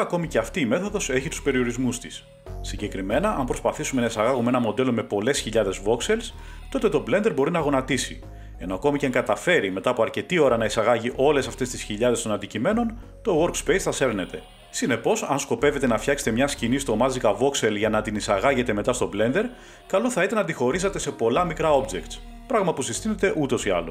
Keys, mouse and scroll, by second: 1.3 click, 1.4 scroll, 3.2 click, 4.9 click, 7.2 click, 8.0 typing, 8.4 Return, 13.2 middle click, 14.2 shift+middle drag, 16.2 click, 19.2 click, 21.2 click, 23.6 click.